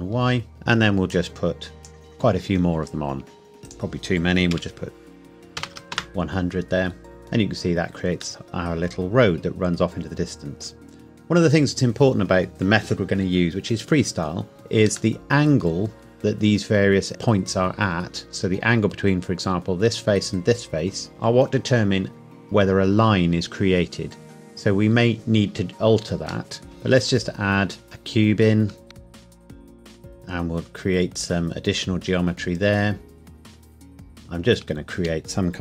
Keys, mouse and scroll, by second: 0.5 middle click, 1.1 click, 4.5 KP_1, 5.6 KP_0, 5.9 KP_Enter, 7.0 middle click, 14.8-15.2 scroll up 1, 15.2 middle click, 26.5 middle click, 26.6 shift+a, 27.8 click, 28.9 Tab, 29.2 ctrl+r, 29.5 scroll up 1, 29.7 click, 30.0 s, 31.2 click, 34.1 click, 34.6 Tab.